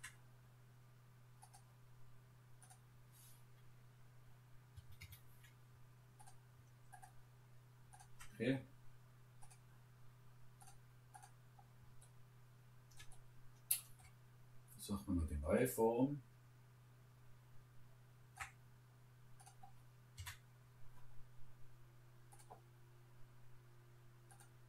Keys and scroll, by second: 4.8 Escape, 20.2 Return.